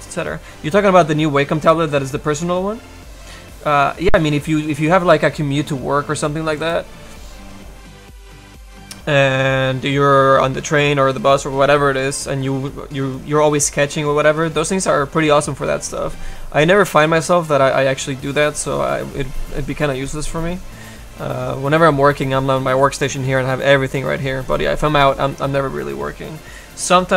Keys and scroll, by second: 23.7 h.